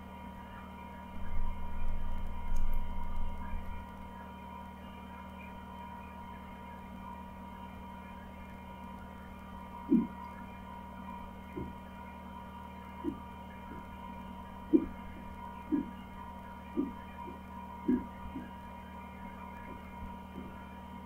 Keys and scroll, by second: 0.3 Down, 1.3 Down, 2.0 Up, 2.4 Up, 2.7-3.3 Up, 5.5 Down, 6.2 Down, 6.8 Down, 7.2 Down, 9.0 Down, 9.4 Down, 9.7-20.0 Down, 20.0 Up, 20.4 Up, 20.5 Up, 20.6-21.0 Up.